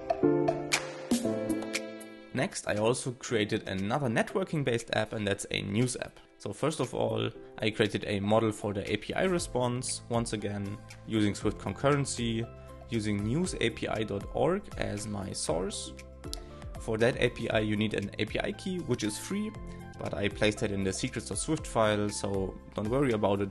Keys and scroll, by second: 3.4 shift+9, 3.6 alt+{, 8.2-9.0 typing, 13.1 shift+l, 14.7 shift+-, 15.4 shift+r, 19.5 super+z, 20.7 shift+', 21.3 shift+/.